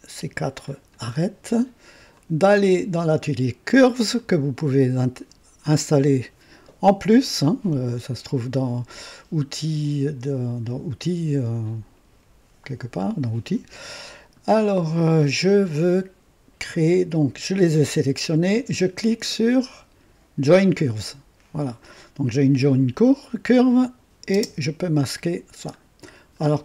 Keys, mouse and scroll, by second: 0.6 ctrl+click, 4.4 click, 20.4 click, 23.6 click, 24.3 space, 25.9 scroll down 1.